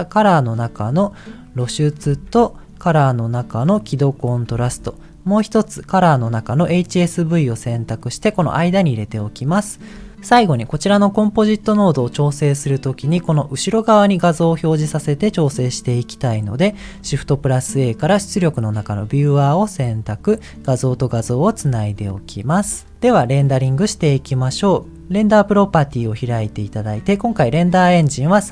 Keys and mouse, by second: 1.7 middle click, 4.4 t, 7.8 middle click, 9.9 middle click, 17.0 shift+a, 20.4 click, 20.7 click, 22.9 ctrl+s, 25.0 click.